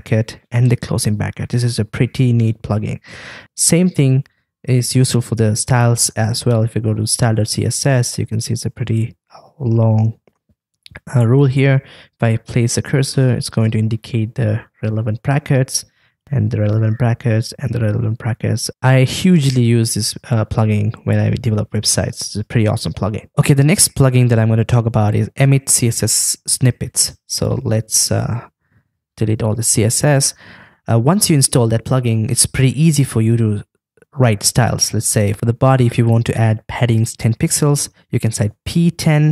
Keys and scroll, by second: 28.8 super+a.